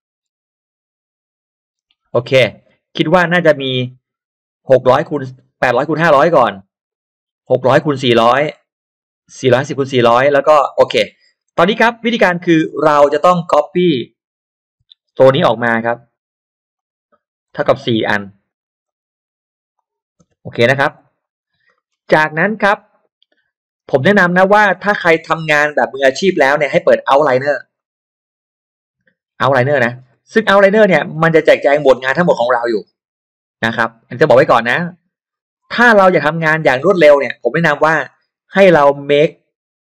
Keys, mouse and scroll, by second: 1.9 space, 2.0 scroll down 2, 2.6 scroll up 1, 3.3-3.7 scroll up 1, 10.9-11.5 scroll down 3, 11.6 scroll up 2, 12.5 scroll down 2, 12.7 middle click, 12.9 click, 14.7 m, 15.3 click, 16.7 click, 17.3 ctrl+click, 18.5 click, 18.8 ctrl+click, 19.7 click, 20.2 space, 20.9 e, 21.0 click, 21.4-21.7 scroll down 2, 21.6 middle click, 21.7 middle click, 22.1-22.4 scroll up 1, 22.1 space, 22.5 click, 24.7 click, 26.1-26.4 scroll down 1, 27.7 click, 28.7-29.1 scroll down 1, 29.9-30.9 scroll up 3, 31.7 scroll down 2, 32.2-32.7 scroll up 2, 32.7-33.2 scroll up 1, 33.5-33.8 scroll down 2, 34.0-34.4 scroll up 2, 35.3-35.9 scroll down 2, 35.9 middle click, 36.3 scroll down 1, 36.7 click, 36.7 space, 37.0 scroll up 1, 37.4 scroll down 1, 37.5 middle click, 38.1-39.4 drag.